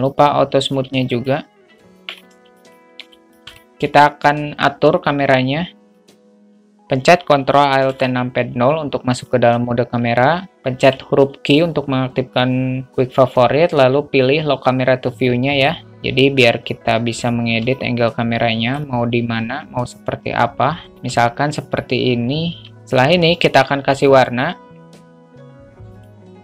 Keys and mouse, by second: 1.3 middle drag, 2.3 middle click, 3.4 shift+a, 3.6 shift+middle click, 4.1 shift+a, 8.2 ctrl+alt+KP_0, 11.1 q, 18.0-19.1 alt+shift+middle drag, 20.9 alt+shift+middle click, 22.7 q, 25.2-25.5 drag.